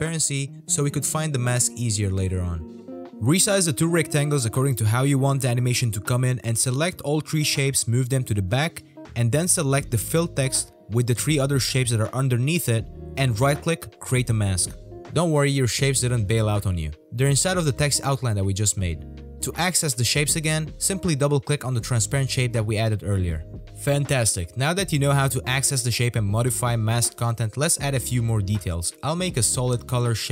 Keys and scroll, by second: 9.2 ctrl+z, 28.0 z, 29.6 z, 30.0 z.